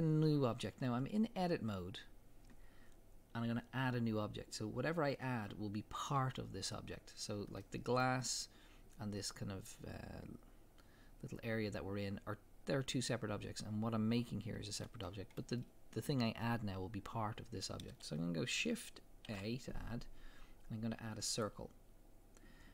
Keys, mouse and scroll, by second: 7.6-11.5 middle drag, 15.1-18.3 middle drag, 19.0-22.7 middle drag, 19.3 shift+a.